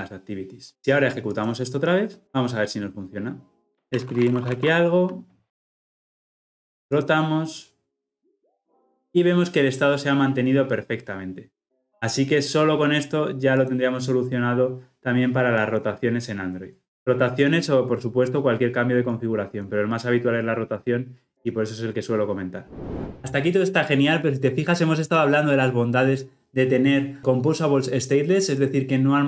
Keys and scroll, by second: 1.4 shift+F10.